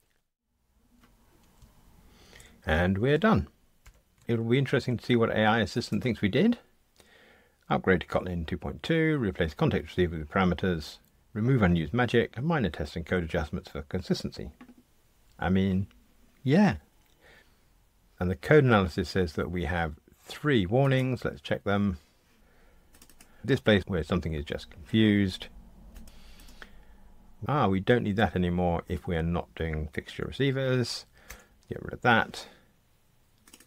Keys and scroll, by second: 31.2 super+BackSpace.